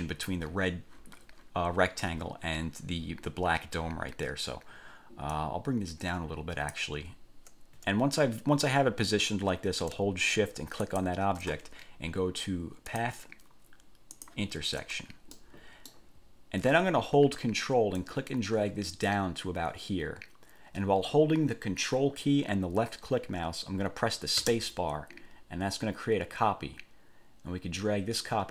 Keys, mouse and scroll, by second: 5.5-7.1 drag, 11.0 shift+click, 13.1 click, 14.3 click, 15.6 middle click, 16.0 click, 18.2-28.5 ctrl+drag, 24.6 ctrl+space.